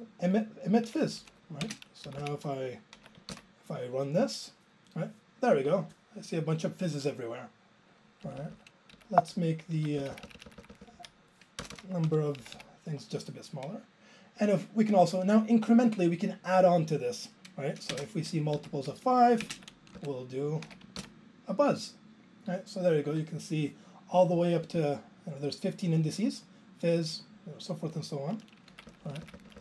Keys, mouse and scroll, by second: 0.9 ctrl+a, 1.2 Up, 1.6 ctrl+space, 2.1 Down, 2.2 Down, 3.7 ctrl+j, 8.3 Up, 8.4 Up, 8.9 Left, 9.8 ctrl+e, 10.0 Left, 10.1 Left, 10.2 Left, 10.3 Left, 10.5 Left, 10.6 Left, 10.7 Left, 10.8 Left, 10.9 Left, 11.6-12.6 typing, 12.6 Down, 17.9 alt+space, 18.6 Down, 18.8 Left, 19.5 ctrl+space, 19.6 ctrl+a, 19.9 Up, 19.9 Up, 21.3 ctrl+j, 28.8 ctrl+e, 28.9-29.6 Left.